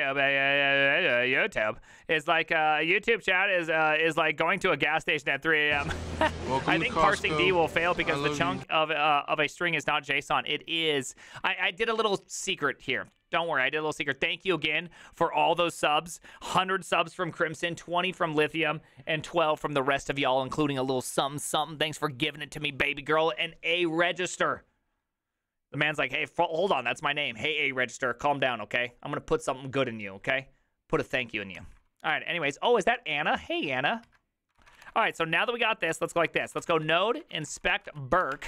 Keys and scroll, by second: 32.4 alt+{, 32.4 ctrl+c, 34.1 alt+{, 34.5-38.4 typing.